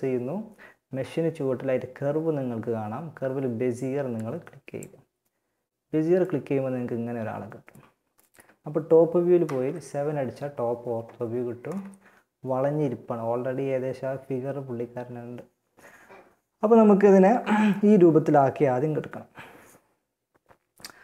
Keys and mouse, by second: 5.4-6.6 middle drag, 8.6 KP_7, 20.5 KP_1.